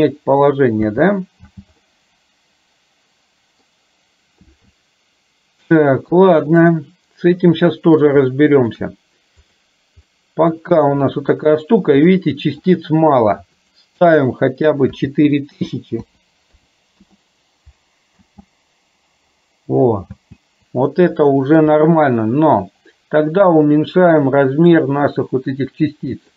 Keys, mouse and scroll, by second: 1.0 space, 1.6 space, 1.9-3.8 middle drag, 6.7-8.1 middle drag, 8.3 shift+middle click, 9.6 click, 10.2 click, 12.3 shift+middle click, 13.7-17.2 drag, 18.3 space, 20.1 space, 21.3 shift+middle click, 24.7-26.3 drag.